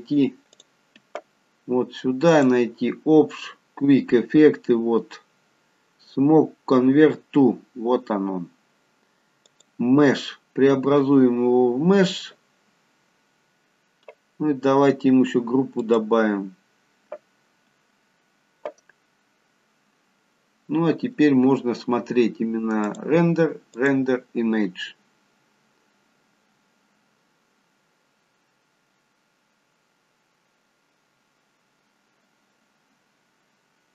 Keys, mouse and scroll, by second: 2.5 click, 13.3-14.0 scroll up 2, 15.9 click, 23.0 click.